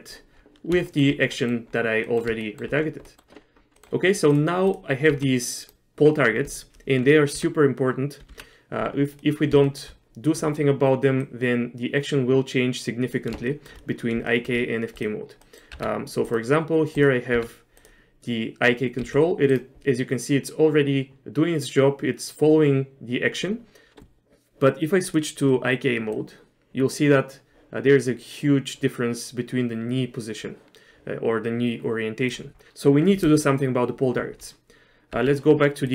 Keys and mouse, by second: 1.0 shift+middle click, 1.4 middle click, 2.1 middle click, 2.5 shift+middle click, 3.1 middle click, 3.8 middle click, 4.4 click, 5.2 g, 8.4 KP_Divide, 9.3 middle click, 9.7 shift+middle click, 11.3-13.2 drag, 13.6 shift+middle click, 14.4 shift+middle click, 15.1 click, 15.5 middle click, 15.8 Tab, 16.4 click, 17.4 Tab, 19.1 g, 26.3-32.4 drag, 35.2 Tab.